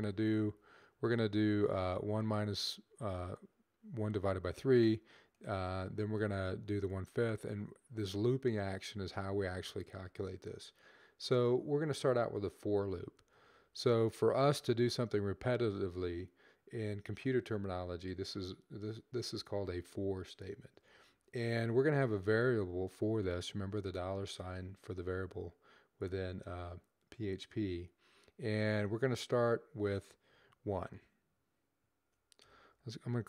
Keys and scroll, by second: 12.4-13.7 typing, 20.3-21.1 typing, 23.2 typing, 32.1-32.8 typing.